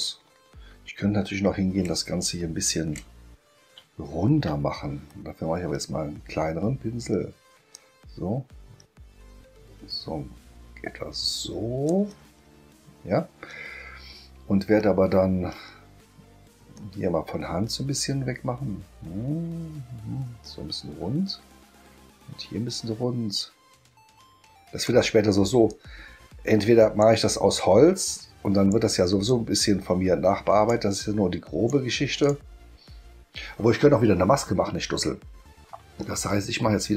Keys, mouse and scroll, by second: 0.7-1.3 ctrl+scroll up 4, 2.2 ctrl+scroll up 2, 2.5 ctrl+scroll down 2, 3.7 space, 7.7-11.8 drag, 16.7-24.8 drag, 25.7-27.0 drag, 27.6-28.7 drag, 29.3-30.7 drag, 31.0-31.7 drag, 32.2 click.